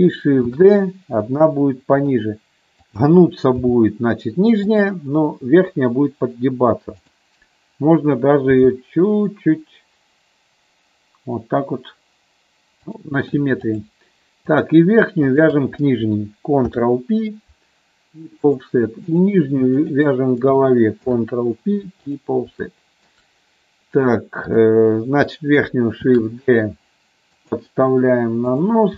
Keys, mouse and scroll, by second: 0.6 shift+d, 3.7 g, 4.8 click, 8.7 g, 14.7 click, 15.5 shift+click, 16.9 ctrl+p, 19.2 click, 21.2 ctrl+p, 22.8 shift+middle click, 24.7 click, 26.2 shift+d, 28.6 click.